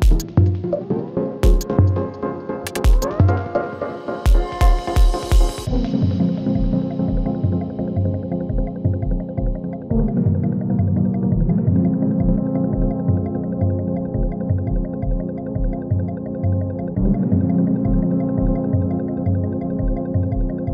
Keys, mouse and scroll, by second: 1.8 F9, 2.4 space, 4.3-5.9 drag, 5.9 space, 7.2-7.9 click, 7.7 space, 10.0 click, 12.7-13.3 drag.